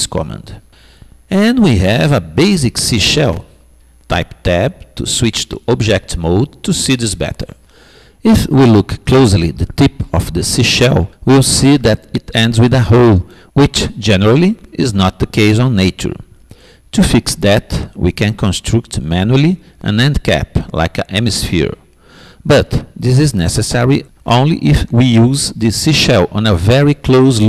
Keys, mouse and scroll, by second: 5.2 Tab, 9.5-12.4 middle drag, 13.2-16.0 middle drag, 16.1 middle click, 17.2-18.6 middle drag, 21.1-23.0 middle drag, 25.3-27.4 middle drag.